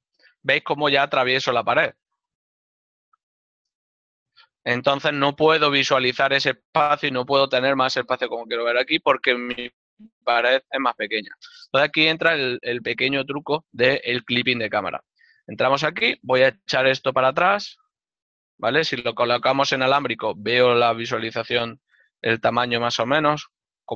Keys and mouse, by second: 1.1 right click, 2.1 ctrl+middle click, 5.5 z, 6.3 right click, 12.7 KP_Add, 19.7 click.